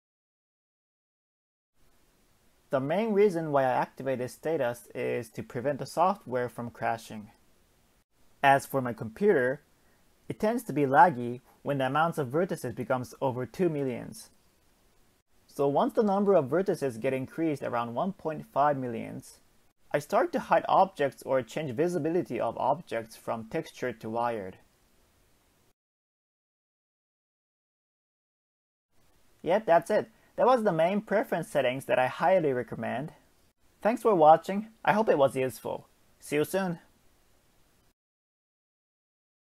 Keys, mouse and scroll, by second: 5.7 scroll up 2, 6.1 Tab, 6.8 scroll down 2, 7.3-9.3 shift+middle drag, 9.3 Tab, 9.9-10.2 scroll down 1, 10.2 shift+a, 12.3 g, 13.7-15.2 shift+middle drag, 15.2 click, 15.5 click, 16.2 Tab, 17.3-18.1 scroll up 1, 18.1-21.0 shift+middle drag, 21.0 Tab, 21.5-24.0 scroll down 1, 24.0 shift+middle click, 24.5 click, 25.7 shift+click, 26.2 Tab, 27.0 click, 28.2 Tab, 29.7-30.0 scroll up 2, 31.5 Tab, 32.6 scroll up 1, 35.1 click, 35.3 click, 36.7 a, 37.7 click, 38.5 space.